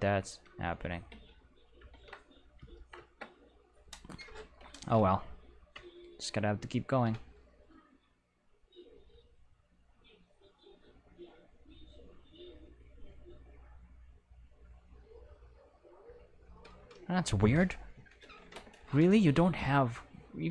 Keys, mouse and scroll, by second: 0.3 a, 1.1 Tab, 1.9 ctrl+Tab, 2.4 click, 4.5 End, 6.3 Home, 9.9 click, 10.5 click, 15.3 click, 16.6 click, 17.1 click, 19.3 click, 20.2 click.